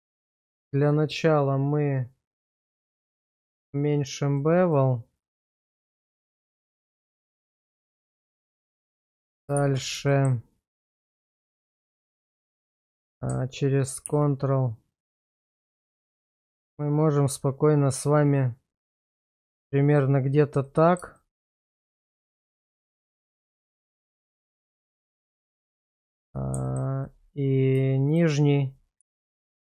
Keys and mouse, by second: 0.0 Tab, 3.0 click, 4.4 click, 7.8 shift+middle click, 9.1 Tab, 9.6 shift+z, 10.1 shift+middle click, 11.0 shift+middle click, 12.8 click, 14.1 ctrl+r, 19.9 click, 20.7 middle click, 21.2 shift+middle click, 22.1 alt+middle click, 23.7 Tab, 24.5 alt+click, 25.3 middle click, 26.7 alt+middle click, 28.1 shift+click, 29.0 x.